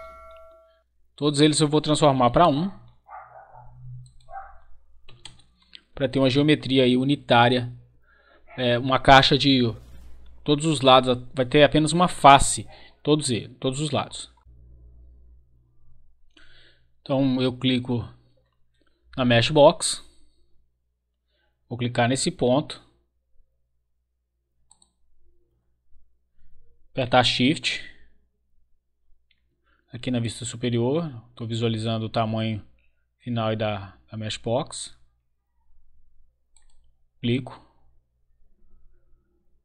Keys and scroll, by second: 2.2 1, 2.4 Return, 5.0 1, 5.2 Return.